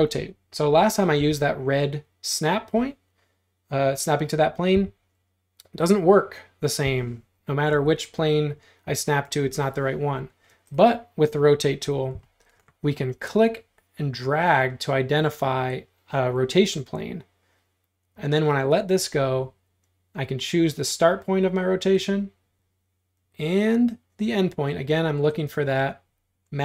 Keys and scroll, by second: 1.2 Tab, 4.8 Home, 7.8 ⟲, 10.6 space, 12.3 q.